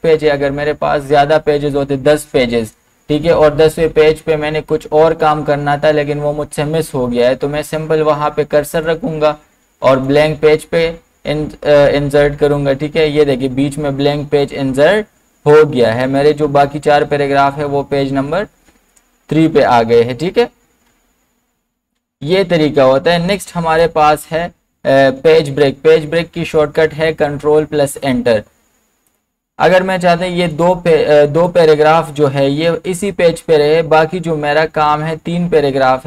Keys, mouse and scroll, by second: 8.8 ctrl+z, 8.8 click, 11.1-12.2 scroll up 1, 13.8 scroll down 1, 18.6 scroll down 1, 21.2 scroll up 1, 23.4 ctrl+z, 28.1 click.